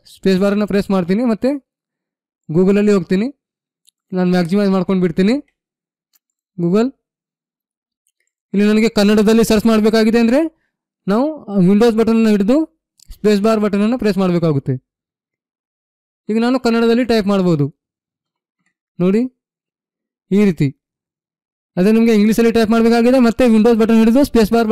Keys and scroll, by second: 2.6 g, 5.4 g, 16.4 k, 18.3 n, 18.6 f.